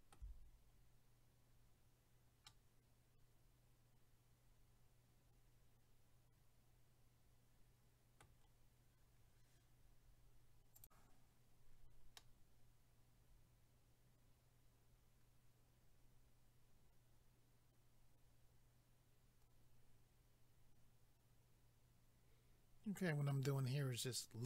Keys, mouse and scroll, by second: 2.5 middle click, 10.8 click, 10.9 click, 12.2 middle click, 24.0 scroll up 1.